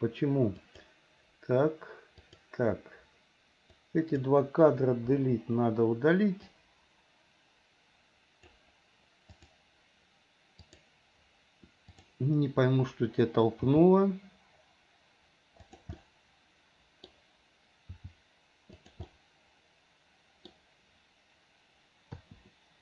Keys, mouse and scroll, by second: 0.7 click, 2.3 click, 3.8 click, 5.2 Delete, 6.6-8.6 drag, 9.4 click, 10.6 click, 12.0 click, 13.6 g, 16.0-17.1 middle drag, 17.1 scroll down 1, 18.0 g, 19.1-20.5 middle drag, 20.5 scroll down 1, 22.2 i.